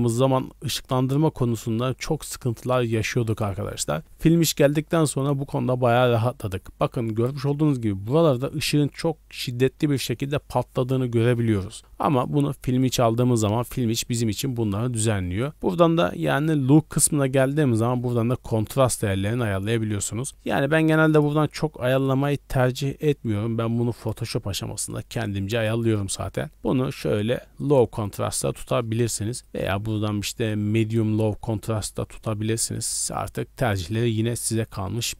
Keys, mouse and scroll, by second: 12.1-13.0 drag, 15.4-18.4 drag, 21.1-22.7 drag, 23.9-25.7 drag, 26.5-27.9 drag, 34.9-35.1 drag.